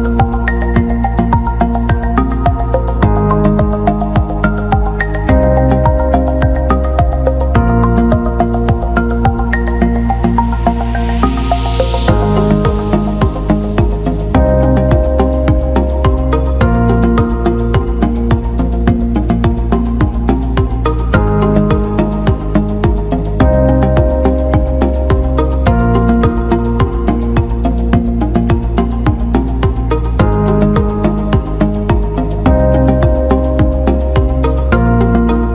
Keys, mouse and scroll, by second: 1.7-4.0 drag, 11.4-12.7 alt+shift+middle drag, 13.8-16.1 alt+middle drag, 16.5 shift+middle click, 17.3 alt+shift+middle click, 17.6 alt+middle click, 19.4 alt+middle click, 21.7 alt+middle click, 22.8 shift+d, 23.6 alt+middle click, 25.1 click, 25.4 click, 26.7-28.6 ctrl+z, 29.6-33.3 drag, 34.3 alt+middle click, 35.3 alt+shift+middle click.